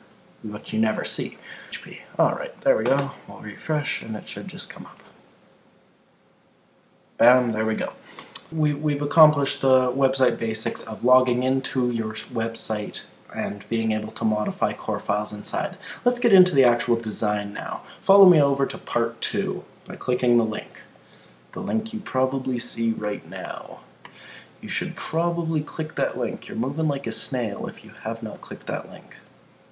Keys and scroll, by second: 1.4 Left, 1.6 Return.